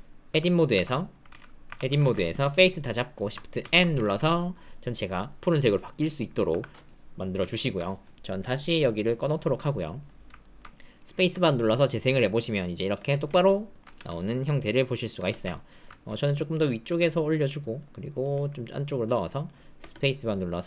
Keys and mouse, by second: 0.3 Tab, 0.7 Tab, 1.3 alt+z, 1.6 Tab, 2.0 alt+z, 2.3 click, 3.6 shift+n, 4.0 alt+z, 4.3 click, 6.4 Tab, 7.5 alt+click, 8.4-9.5 drag, 9.7 click, 10.4 alt+click, 11.3 space, 12.9 space, 13.4 alt+click, 13.9 space, 15.1 space, 15.5 alt+click, 16.3 click, 16.8 g, 17.7 click, 18.2 g, 19.1 click, 19.7 space.